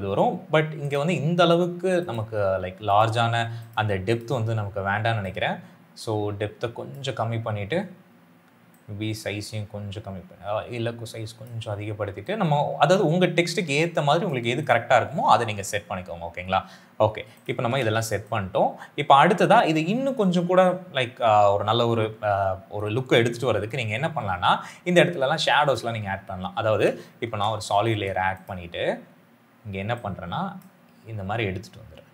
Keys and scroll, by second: 17.7 s, 27.1 ctrl+y.